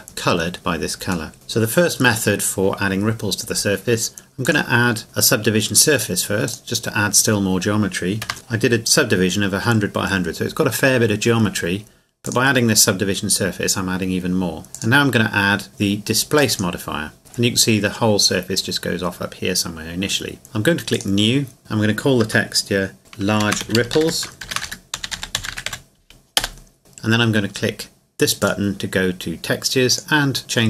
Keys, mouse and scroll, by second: 0.2 middle click, 0.5-1.3 scroll down 1, 1.3 middle click, 1.6 click, 4.4 click, 6.5 click, 8.2 Tab, 12.2 click, 14.7 click, 20.9 click, 23.4-25.7 typing, 26.4 Return, 28.4 click.